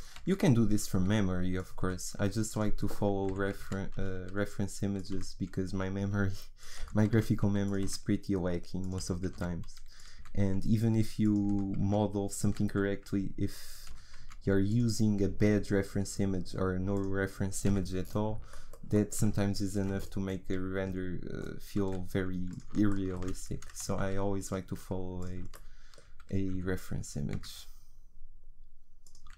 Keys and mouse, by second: 1.8 s, 3.3 e, 5.2 s, 6.8 e, 7.9 s, 9.0 e, 10.3 s, 11.5 e, 12.5 s, 13.9 e, 15.4 s, 17.7 f, 18.0 click, 19.7-21.8 drag, 21.8 s, 23.5 e, 24.7 s, 26.5 e, 29.2 s.